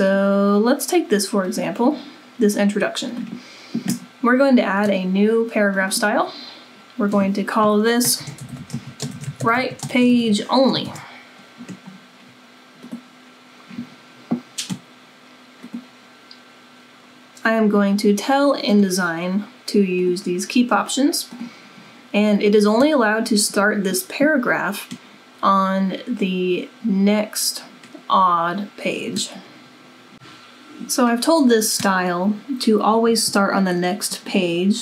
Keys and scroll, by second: 7.9-10.8 typing.